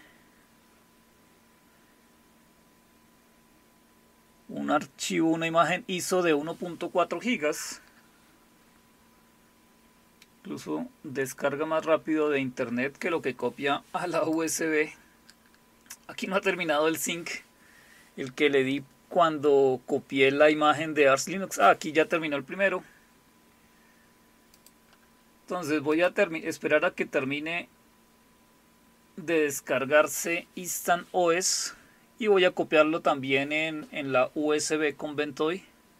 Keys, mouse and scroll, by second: 14.3 click, 24.6 click, 25.9 click.